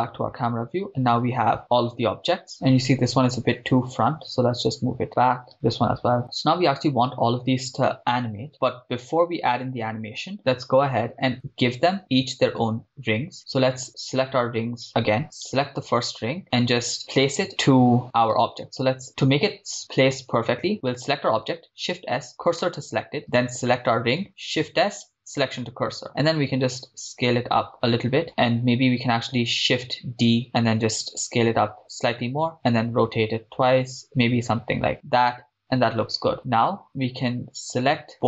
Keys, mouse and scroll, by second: 2.5 click, 2.5 right click, 2.5 g, 3.6 g, 3.8 y, 5.1 click, 5.5 right click, 6.2 h, 6.2 click, 6.2 g, 13.2-14.2 scroll down 2, 14.2 scroll down 4, 14.2 click, 15.2 right click, 15.6 click, 15.6 right click, 18.6-20.4 drag, 18.6 right click, 21.6 shift+s, 23.5 right drag, 24.6 shift+s, 26.3 s, 28.3 click, 30.4 shift+d, 31.2 s, 31.9 click, 32.6 r, 32.7 r, 34.9 click, 36.0-36.8 scroll up 6.